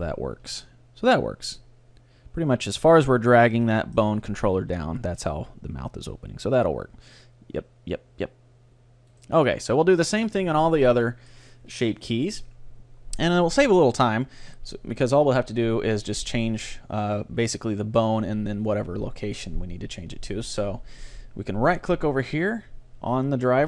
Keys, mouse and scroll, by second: 0.3 g, 3.5-5.4 right drag, 3.7-5.4 middle drag, 4.3 g, 9.2-11.0 right drag, 9.5-11.9 middle drag, 11.9 click, 11.9-13.6 right drag, 21.7-23.6 right drag.